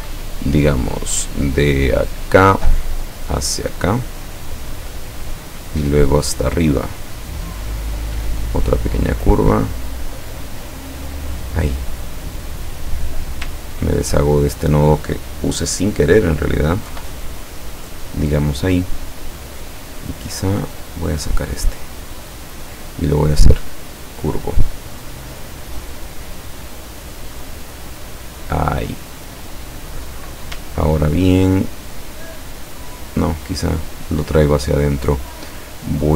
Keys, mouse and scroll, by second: 2.3 click, 3.9 click, 7.8 click, 9.9 click, 11.0 click, 13.0 click, 13.8-14.1 ctrl+scroll up 2, 14.7 click, 16.9 Delete, 20.5-22.9 drag, 23.5 click, 25.4-27.2 drag, 27.7-29.5 drag, 30.8-31.2 ctrl+scroll down 2, 31.8 ctrl+scroll down 2, 32.5-34.1 ctrl+drag.